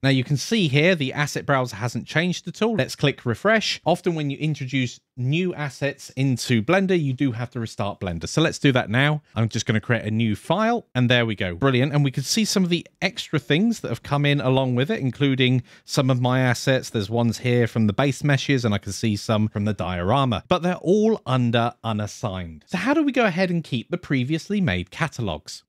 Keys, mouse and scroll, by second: 2.1 click, 2.7 click, 2.8 click, 3.3 click, 8.9 click, 9.7 click, 12.8-13.6 scroll down 5, 13.7-14.7 scroll up 7, 14.7-15.1 scroll down 2, 15.5 scroll up 1, 16.3-16.7 scroll down 2, 16.7-17.1 scroll up 2, 18.2-19.2 scroll up 1, 20.8 click.